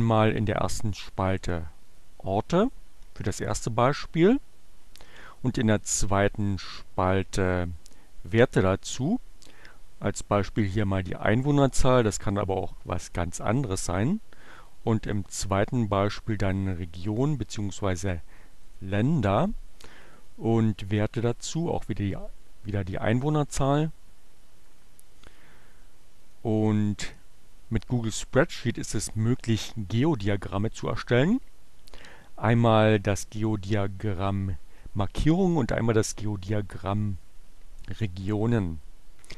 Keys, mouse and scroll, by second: 0.8-2.2 drag, 2.4 click, 5.4 click, 6.4 click, 7.1 click, 14.4 click, 16.0 click, 17.5-19.0 drag, 19.2-20.5 drag, 20.8 click, 21.4 click, 23.6-25.0 drag, 26.1 click.